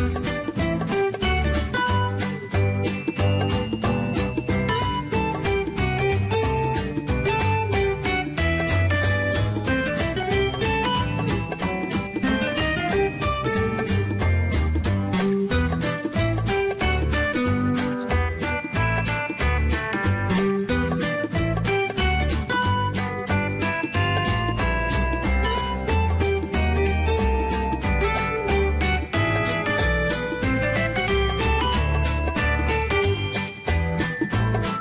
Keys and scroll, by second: 8.8-10.1 typing, 10.2 Return, 14.4-15.6 typing, 16.6 ctrl+z.